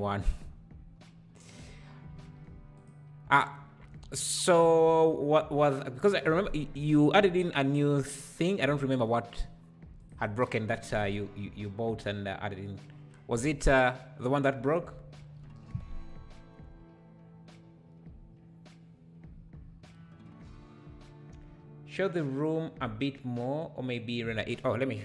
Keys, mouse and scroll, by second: 2.9 click.